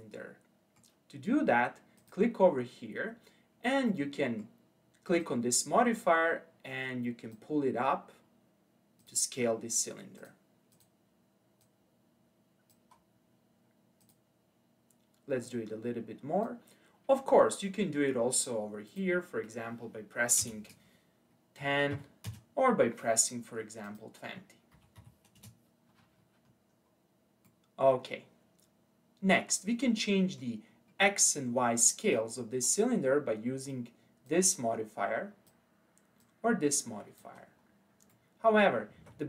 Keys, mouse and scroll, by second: 2.0-3.9 drag, 3.9-5.2 middle drag, 5.2 click, 7.8-9.0 scroll down 2, 9.0 click, 10.2 click, 11.6 click, 13.0-14.0 scroll down 3, 14.0 click, 15.4 click, 18.9-22.0 drag, 23.9-26.5 drag, 26.5-27.1 scroll down 3, 27.1 scroll down 1, 27.5-30.5 middle drag, 30.7-31.5 scroll up 4, 31.5-32.7 scroll down 3, 32.8-34.3 scroll up 3, 34.3 click, 36.2 click, 37.4-38.0 scroll down 3, 38.1-39.0 middle drag, 39.0 ctrl+z.